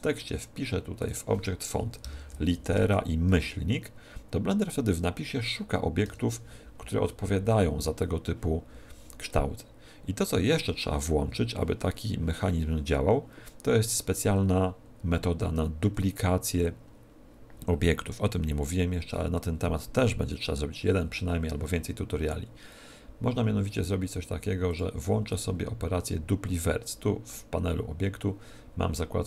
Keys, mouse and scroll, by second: 1.0-2.6 drag, 24.6-26.4 drag.